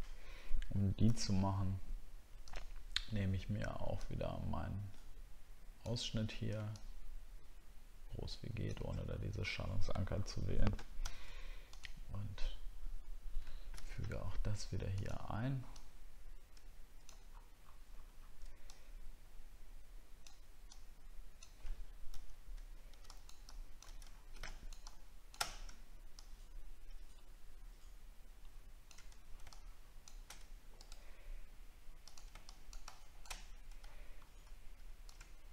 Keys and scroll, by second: 17.3 alt+scroll up 1, 17.9-18.2 alt+scroll up 2, 24.0 ctrl+t, 24.0 alt+scroll down 7, 33.8-34.3 alt+scroll up 2.